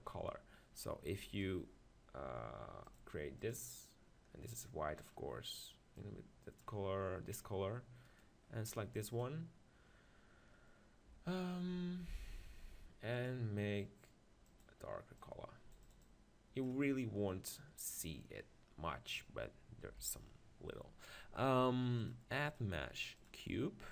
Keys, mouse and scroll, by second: 1.4-3.5 right drag, 3.5-6.8 drag, 8.1-14.5 right drag, 9.2-15.2 drag, 16.1-17.9 drag, 17.9 middle click, 19.9 KP_1, 22.5-23.9 drag.